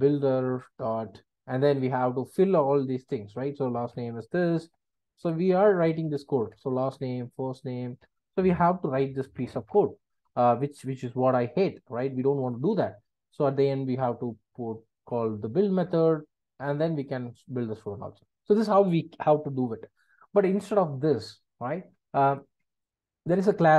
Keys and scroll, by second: 2.3 Return, 8.0 Return, 15.8 Return, 16.7 alt+Return.